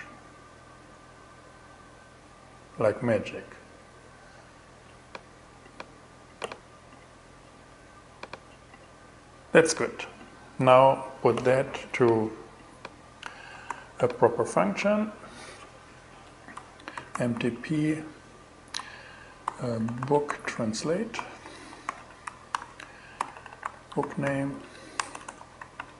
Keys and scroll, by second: 13.1 super+n, 16.2-17.3 typing, 18.7-25.9 typing, 22.0 alt+5.